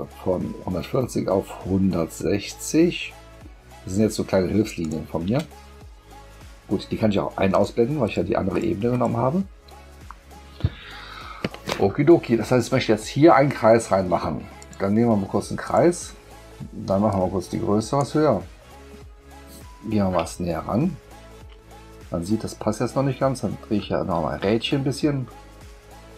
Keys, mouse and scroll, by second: 4.8 shift+click, 7.5 click, 8.0 click, 8.5 click, 8.9 click, 14.6 click, 15.6 click, 17.1 click, 20.4 ctrl+middle click, 20.4-20.8 ctrl+scroll up 2, 23.7 middle click, 23.7-24.3 scroll up 2, 24.6 middle click.